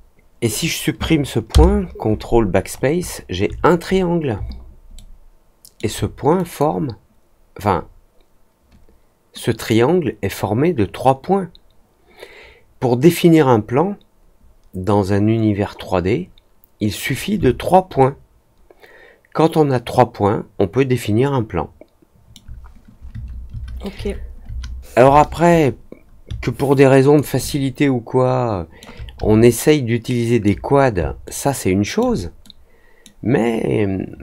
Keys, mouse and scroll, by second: 2.6-3.1 scroll up 2, 3.8 scroll down 1, 4.9 alt+scroll down 1, 5.0 alt+middle click, 6.3 click, 9.6-17.0 drag, 17.9-22.3 alt+middle drag, 26.7 alt+click, 27.4-28.7 alt+middle drag, 29.4-30.4 alt+middle drag, 31.2 alt+middle click, 32.4 middle click.